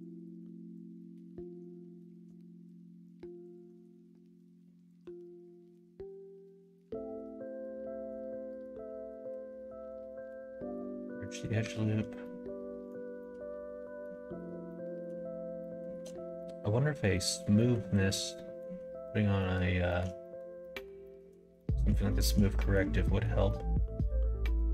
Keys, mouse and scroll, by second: 0.0 click, 0.9 middle click, 1.3 middle click, 2.4 shift+middle click, 3.4 alt+click, 4.8 alt+shift+click, 5.2 middle click, 6.8 ctrl+e, 9.2 ctrl+e, 10.5 middle click, 11.2 middle click, 11.6 2, 12.2 middle click, 13.1 middle click, 14.7 middle click, 15.5 shift+middle click, 16.3 middle click, 17.1 middle click, 17.5 shift+middle click, 17.9 middle click, 18.3 middle click, 19.3 shift+middle click, 19.8 shift+middle click, 20.1 middle click, 20.5 middle click, 21.0 shift+middle click, 21.5 middle click, 22.0 shift+middle click, 22.5 middle click, 23.0 middle click, 23.4-24.5 middle drag.